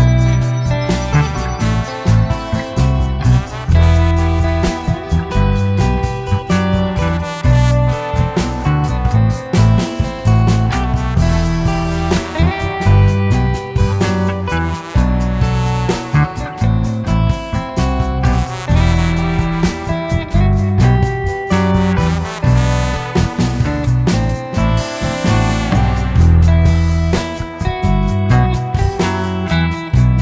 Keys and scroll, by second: 0.5 Escape, 1.0 Escape, 1.6-2.5 typing, 5.5-6.9 typing, 8.0 Escape, 9.5 Escape, 9.7 Escape, 10.0 Escape, 10.0 o, 10.1 space, 13.2 Escape, 13.2 Escape, 13.4 Escape, 14.3 m, 14.4 space, 16.3 Escape, 17.9 Escape, 20.7 Escape, 23.0 m, 23.0 space, 25.7 Escape, 28.7 Escape, 28.8 Escape, 29.0 o, 29.1 space, 29.5 space.